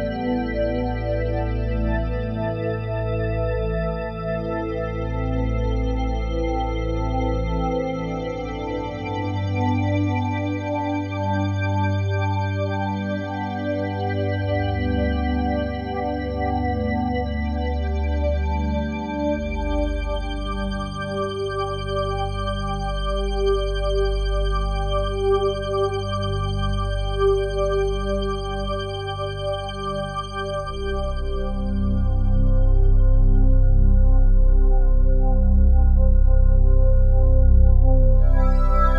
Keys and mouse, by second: 0.2 ctrl+s, 0.6-1.7 drag, 1.1 space, 2.5 typing, 4.2 space, 4.9 click, 6.0-6.4 typing, 7.2-8.7 drag, 8.2-8.9 typing, 11.5 space, 12.8-13.7 drag, 14.1-15.2 typing, 15.2-19.7 drag, 20.5 typing, 22.9 shift+click, 23.7 click, 24.0 typing, 26.6-28.1 typing, 29.2-31.9 drag, 30.2 typing, 31.5 space, 34.7 space, 35.1 click, 35.3 space, 37.5 space, 37.9 shift+click, 38.6 shift+click.